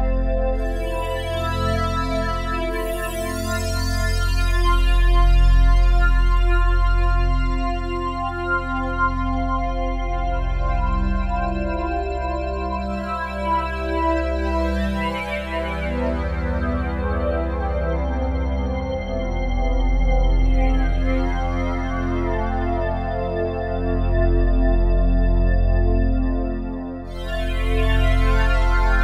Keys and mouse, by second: 0.0-2.8 typing, 0.3 click, 4.6 typing, 7.0 typing, 9.1 typing, 10.6-14.9 shift+drag, 14.9-16.2 typing, 16.2-17.5 shift+drag, 17.5-19.4 typing, 18.3 click, 20.8-21.6 typing, 21.1 click, 23.0 typing, 23.7 click, 24.2-25.6 typing, 27.6-29.0 drag.